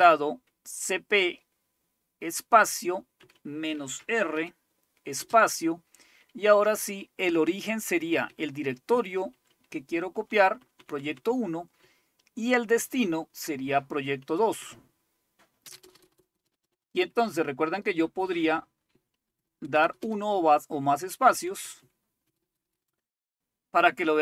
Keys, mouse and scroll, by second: 0.0 Up, 1.1 Left, 1.8 Left, 2.3-2.7 Left, 3.2 Right, 4.0-5.2 typing, 7.3 Right, 7.6 Right, 7.8 Right, 7.9 Right, 8.1 Right, 8.3 Right, 8.5 Right, 8.6 Right, 9.3 Right, 10.1 Left, 10.4 Left, 10.6 Left, 10.8 Left, 11.0 Left, 11.1 Left, 11.8 Right, 12.4 Right, 12.5 Right, 12.6 Right, 12.8 Right, 13.5 Right, 14.2 Right, 14.4 Left, 14.6 Left, 15.7 Tab, 15.9-16.7 typing, 17.2-18.4 Left, 18.9 Right, 19.3 space, 19.5 space, 19.6 space, 20.0 space, 20.3-21.1 Left, 21.3 Left, 21.5 Left, 21.7 Left, 21.8 Left, 22.2 space, 22.8 space.